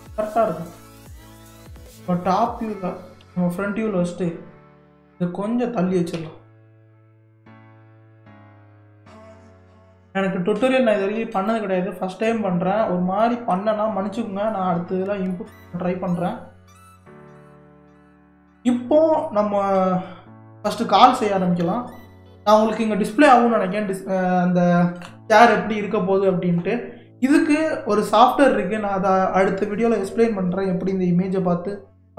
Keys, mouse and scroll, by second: 1.7 KP_7, 5.1 click, 6.2 g, 12.3-12.8 middle drag, 12.8 scroll down 2, 13.2-14.5 middle drag, 14.5-14.9 scroll up 2, 14.9-15.3 scroll down 2, 15.3-20.5 middle drag, 20.5 scroll up 1, 22.7-23.5 scroll down 2.